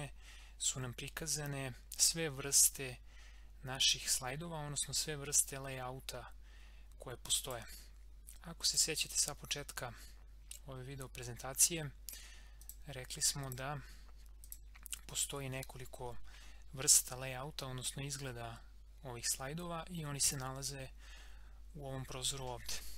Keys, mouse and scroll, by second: 12.6 click, 16.1 scroll down 1, 17.1 scroll up 1, 20.2 click.